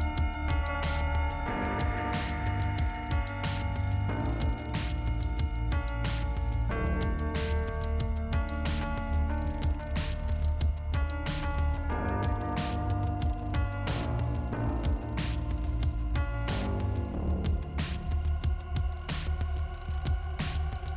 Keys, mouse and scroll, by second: 0.1 middle click, 0.6-1.8 scroll up 2, 2.3 i, 4.1 click, 6.0 click, 8.1 click, 10.3 click, 10.7 click, 12.0 click, 16.7 click, 18.1 p.